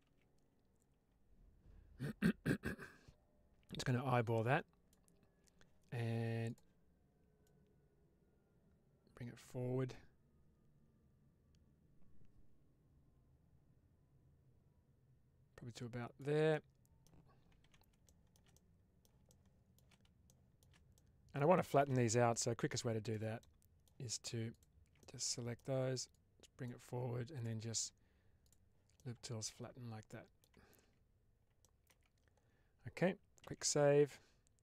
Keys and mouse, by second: 2.7-4.8 drag, 6.4 click, 7.4-16.1 drag, 16.4 middle click, 17.5 alt+z, 17.9 shift+middle click, 18.4 middle click, 19.2 middle click, 19.4 click, 20.1 middle click, 20.9 middle click, 21.5 shift+click, 22.5 3, 22.9 click, 23.3 middle click, 24.9 middle click, 26.0 click, 28.3 click, 28.8-30.4 middle drag, 30.7 Tab, 31.5 middle click, 31.8 Tab, 33.3 ctrl+s.